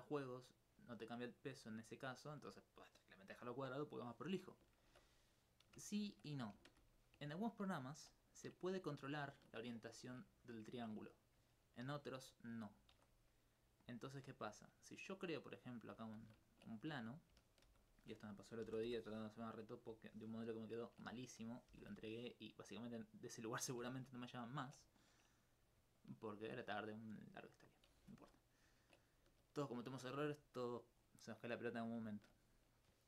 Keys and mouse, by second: 6.7 shift+space, 13.8 click, 14.1 shift+a, 15.7 click, 17.7 alt+g, 18.7 g, 18.9 y, 19.7 click, 23.5 shift+click.